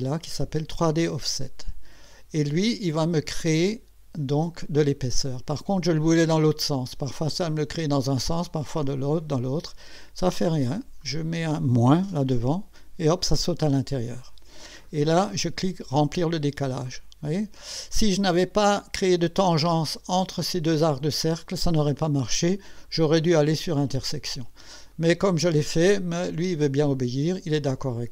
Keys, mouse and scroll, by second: 1.2 click, 11.0 click, 16.0 click, 16.9-18.1 drag, 22.9 click, 24.2 click, 24.9-27.8 drag.